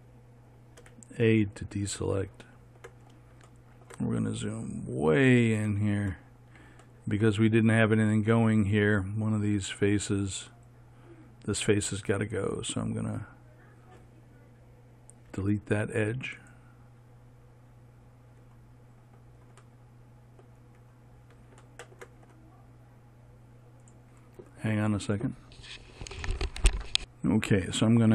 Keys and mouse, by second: 1.3 a, 3.1 middle click, 4.5 middle click, 11.0-15.1 right drag, 15.8 x.